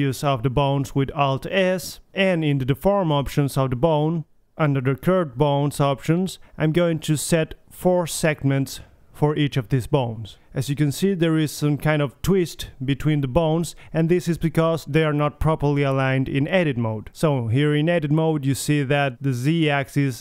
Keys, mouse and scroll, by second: 0.7 right click, 1.2 alt+s, 1.8 ctrl+alt+s, 2.7 ctrl+alt+s, 4.9 Tab, 5.6-6.5 drag, 6.9-8.8 drag, 8.8-9.2 middle drag, 9.4 middle click, 9.6 click, 9.9 click, 10.2 right click, 11.0-13.5 middle drag, 14.8 drag, 15.5 middle click, 16.6 right click, 17.2 right click, 18.0 click, 18.3 click, 18.5-20.0 middle drag, 20.0 click.